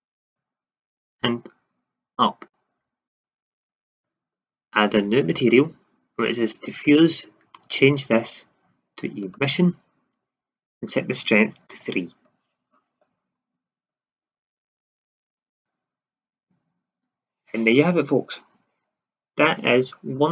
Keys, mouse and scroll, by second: 2.1-9.3 drag, 10.6-13.5 drag, 13.7 shift+z, 15.5 KP_0.